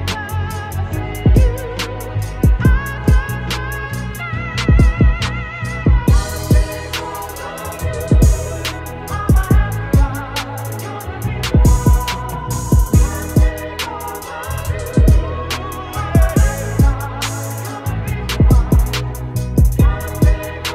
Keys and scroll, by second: 0.8 ctrl+=, 1.5 ctrl+space, 8.0 b, 11.2 space, 11.8 ctrl+-, 12.3 s, 12.8 space.